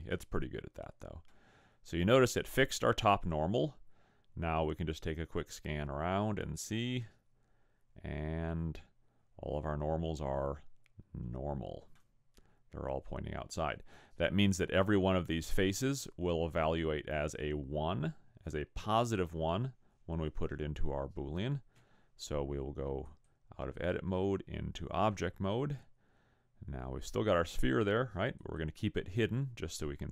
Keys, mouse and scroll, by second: 1.5 middle click, 11.1 middle click, 12.4 middle click, 23.1 click, 27.7 click, 28.4 click.